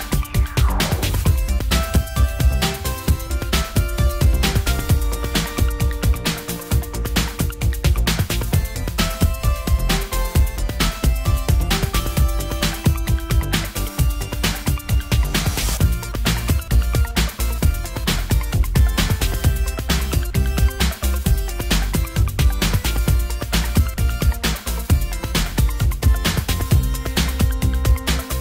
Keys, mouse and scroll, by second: 0.1 click, 0.1 middle click, 0.3 click, 0.3 middle click, 1.6 click, 2.7 click, 2.8 middle click, 3.6 click, 6.3 click, 8.1 click, 12.6 click, 13.0 click, 13.0 typing, 13.8 middle click, 15.6 middle click, 18.5-19.5 middle drag, 22.0 click, 23.0 middle click, 24.5 middle click, 24.7-25.7 drag, 25.7 middle click, 26.1-27.9 drag.